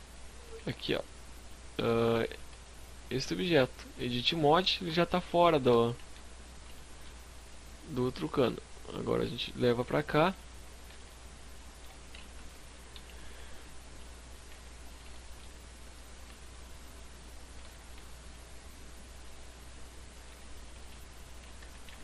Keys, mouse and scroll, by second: 0.3 right click, 1.0 scroll down 4, 1.2 z, 1.5 middle click, 2.1 Tab, 2.9 middle click, 3.8 KP_1, 4.2 KP_3, 4.5 KP_5, 4.9 z, 5.4-6.1 scroll down 3, 5.7 shift+middle click, 7.2 click, 9.5 scroll up 3, 9.8 z, 10.0 middle click, 11.3-13.5 typing, 13.5-14.0 scroll up 5, 14.0 shift+middle click, 15.1 click, 16.6 s, 19.3 shift+click, 19.8 s, 20.5 click, 20.9 g.